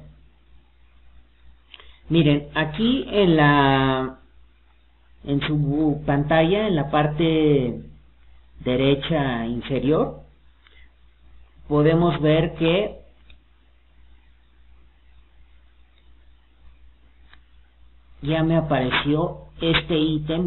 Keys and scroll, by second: 6.8 alt+d.